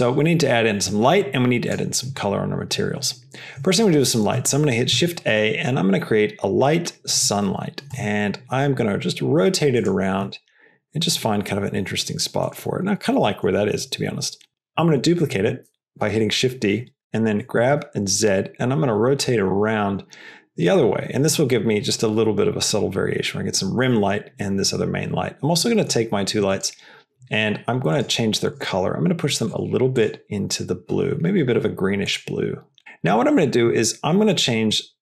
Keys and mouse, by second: 0.9 click, 4.8 shift+a, 7.8 r, 10.1 r, 14.7 shift+d, 16.8 r, 26.4 click, 27.8 click, 28.4 click, 32.7 click, 34.7-35.0 drag.